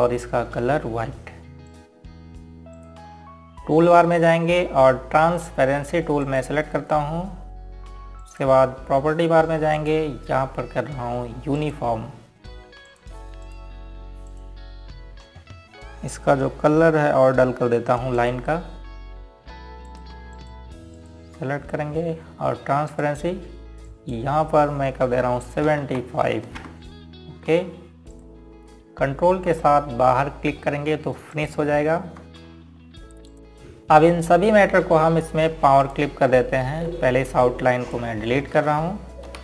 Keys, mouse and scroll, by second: 0.0 shift+Page_Down, 1.4 scroll up 1, 3.4 click, 7.9 click, 15.1 ctrl+click, 16.0 click, 16.4 scroll down 1, 17.4-18.0 scroll up 1, 19.8 ctrl+alt+click, 21.6 ctrl+click, 27.2 KP_7, 27.5 KP_5, 28.1 KP_Enter, 29.8 click, 31.3 scroll down 1, 32.3 scroll up 1, 33.0 ctrl+click, 33.3 click, 35.2 click, 37.5 click.